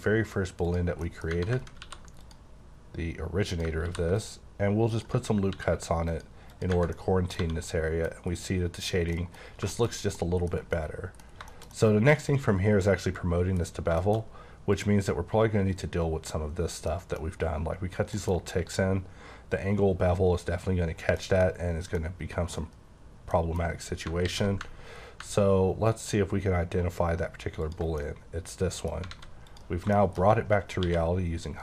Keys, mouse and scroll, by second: 0.7 click, 1.0 middle click, 1.3 Tab, 1.8 ctrl+r, 2.2 click, 3.5 click, 3.8 ctrl+r, 4.2 click, 4.9 click, 5.5 ctrl+r, 6.1 click, 6.5 click, 6.7 Tab, 7.0 middle click, 7.4 1, 7.6 middle click, 8.1 middle click, 9.2 middle click, 9.4-10.0 scroll down 4, 9.7 middle click, 10.1 middle click, 10.5 scroll down 3, 10.7 middle click, 11.5 shift+middle click, 11.9 middle click, 13.6-14.4 scroll up 6, 14.0 shift+middle click, 14.7 click, 16.6 scroll down 3, 16.9 middle click, 18.1 middle click, 18.4-20.6 scroll up 8, 20.9-21.8 scroll down 6, 21.2 middle click, 21.9 middle click, 23.0-24.1 scroll down 6, 23.3 middle click, 24.2 w, 27.7 ctrl+click, 28.0 middle click, 29.1 alt+a, 29.5 click, 29.9 shift+middle click, 30.3 shift+scroll up 3, 30.8 q.